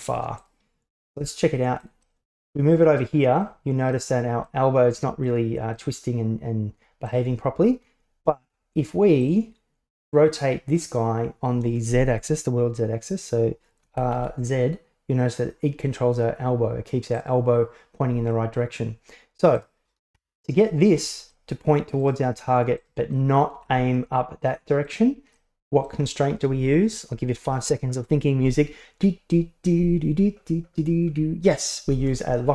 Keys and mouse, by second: 1.1 g, 2.2 middle click, 3.1-3.5 middle drag, 4.1 middle click, 5.4 middle click, 7.1 right click, 9.3 drag, 13.9 r, 19.6 right click, 20.2 alt+g, 20.6-21.0 right drag, 21.0 middle click, 22.1 right click, 22.8 right click, 23.2 middle click, 23.7 r, 25.4-25.9 middle drag.